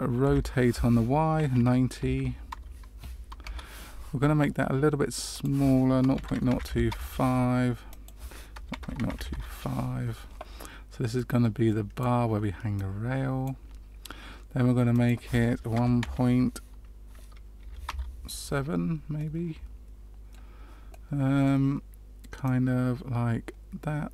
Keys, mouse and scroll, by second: 0.2 r, 5.3 click, 7.8 click, 11.1 click, 12.7 click, 14.9 click, 19.1 middle click, 20.9 middle click, 22.4 click.